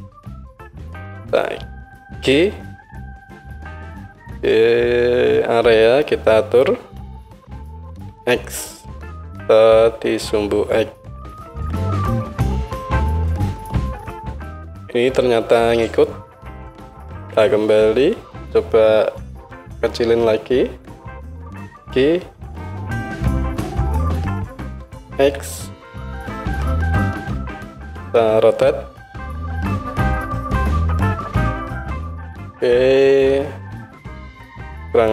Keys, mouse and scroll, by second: 0.0-32.5 middle drag, 2.2 g, 17.1 ctrl+z, 21.7 g, 28.8 r, 32.5 click, 32.6-35.1 middle drag.